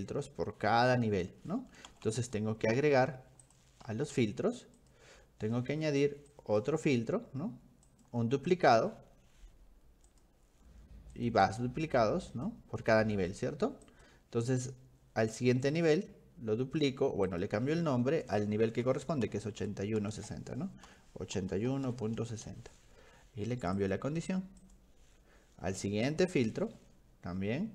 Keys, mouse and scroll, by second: 1.3 middle click, 1.9 v, 2.1 v, 3.5 click, 4.8 click, 6.3 click, 7.9 click, 10.1 click, 11.2 click, 11.5 click, 11.8 click, 12.3 click, 13.9 click, 17.3 click, 19.3 ctrl+shift+Left, 19.4 ctrl+shift+Left, 21.4 1, 22.4 Return, 23.8 click, 24.6 click, 26.1 click.